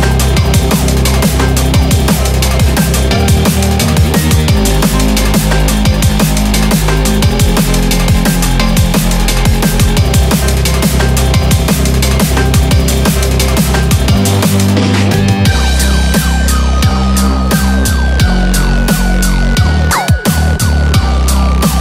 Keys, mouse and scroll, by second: 10.4 click, 11.3 g, 12.5 click, 12.5 g, 12.6 g, 13.7 click, 13.7-20.2 typing, 14.5 click, 14.6 click, 15.4 click, 16.4 click, 17.2 click, 18.2 click, 19.2 click, 20.0 click, 21.2 click, 21.3-21.8 typing.